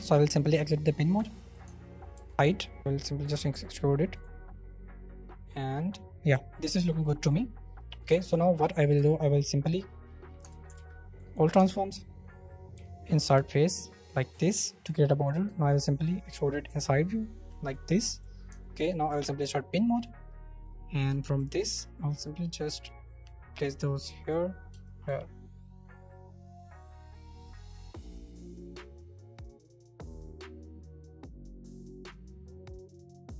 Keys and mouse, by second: 0.5 middle click, 1.6 Tab, 3.3 Tab, 4.1 middle click, 8.0 click, 8.9 Tab, 10.4 Tab, 10.7 ctrl+a, 11.5 Tab, 12.7 i, 14.0 shift+middle click, 14.5 middle click, 15.4 e, 17.6 click, 18.0 drag, 18.5 Tab, 19.3 click, 24.0 click, 24.8 shift+middle drag, 26.6 middle click, 28.6 shift+middle click, 29.1 middle click, 30.3 shift+middle click, 30.7 shift+middle click, 31.5 shift+middle drag, 33.0 shift+middle drag, 33.0-33.3 shift+drag.